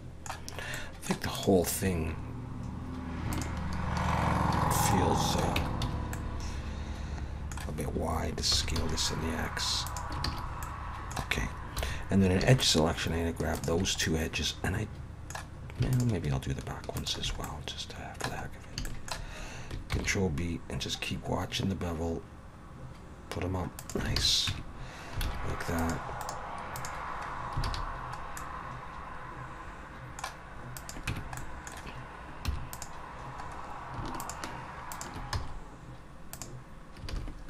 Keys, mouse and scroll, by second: 0.5 scroll up 3, 0.8 middle click, 1.3 click, 3.3 shift+click, 4.9 middle click, 5.6 Tab, 5.8 a, 6.1 middle click, 8.5 s, 10.2 alt+a, 10.6 middle click, 11.8 2, 12.6 alt+shift+click, 13.5 alt+shift+click, 14.0 middle click, 15.9 alt+shift+click, 17.0 alt+shift+click, 17.4 middle click, 18.5 scroll up 2, 18.8 shift+middle click, 19.9 ctrl+b, 24.2 alt+a, 24.5 Tab, 25.3 alt+a, 25.8 click, 26.2 right click, 27.7 alt+a, 27.8 scroll down 4, 28.4 middle click, 30.8 click, 31.1 Tab, 31.4 middle click, 32.5 3, 32.7 click, 33.4 scroll up 2, 34.2 shift+click, 34.9 click, 35.3 x, 37.1 alt+a.